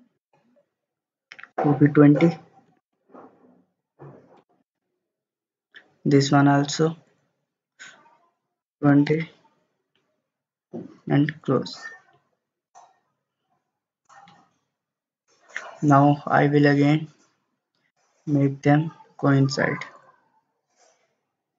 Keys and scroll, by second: 2.7 typing, 4.4 typing, 4.7 Return, 8.6 typing, 9.1 Return.